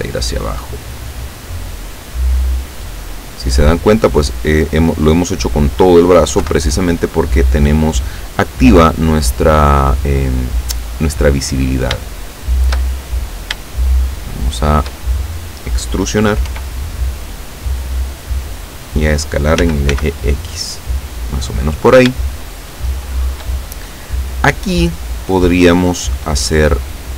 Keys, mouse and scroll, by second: 2.8 middle click, 3.8 scroll down 1, 6.4 KP_7, 12.1 shift+middle click, 13.0-13.6 shift+scroll up 3, 13.7-15.0 shift+middle drag, 16.6 e, 18.6 click, 19.7 s, 20.0 x, 21.2 click, 22.2-23.6 shift+middle drag, 26.3 middle click.